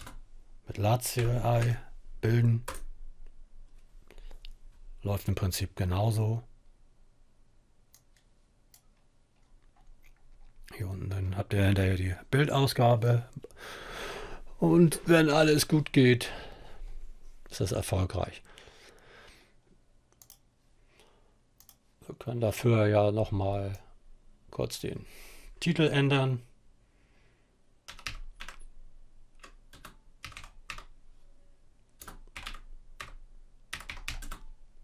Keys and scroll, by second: 0.0-2.2 typing, 27.0-34.8 typing.